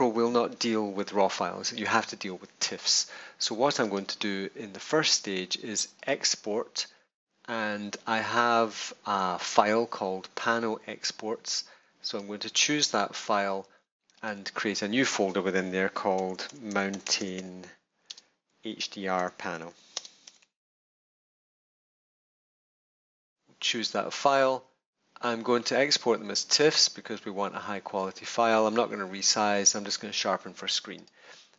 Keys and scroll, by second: 15.8-21.2 typing.